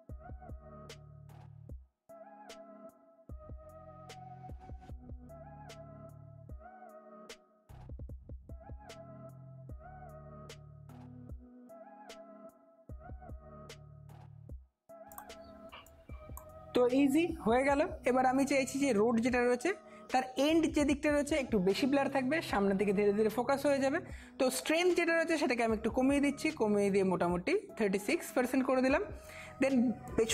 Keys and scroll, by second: 1.1 space, 3.0 space, 3.3 space, 4.7 space, 4.9-5.4 ], 6.7-9.7 typing, 11.4 space, 14.5 ], 18.0-19.5 typing.